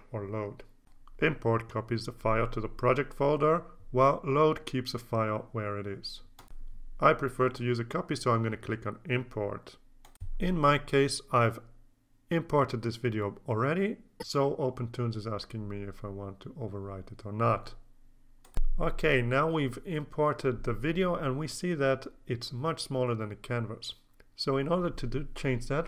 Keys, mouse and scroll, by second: 10.6 click, 12.4 click, 18.3 click.